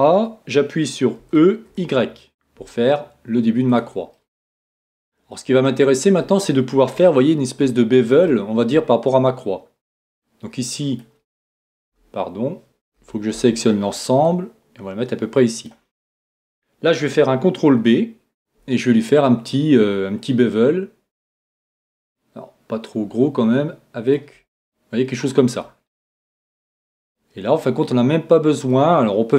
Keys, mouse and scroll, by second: 1.2 e, 3.8-5.5 drag, 4.1-10.1 middle drag, 10.2-11.7 drag, 11.8 super+click, 11.9 super+z, 13.0 a, 13.3 a, 14.2-16.1 drag, 17.7 ctrl+b, 24.1-26.4 drag, 24.5-26.4 middle drag, 26.7 Tab, 27.1-29.3 middle drag.